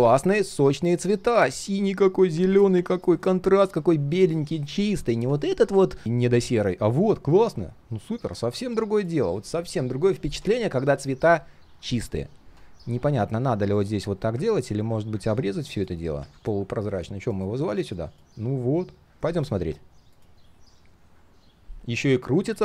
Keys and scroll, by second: 14.5 ctrl+alt+g, 16.2 ctrl+z.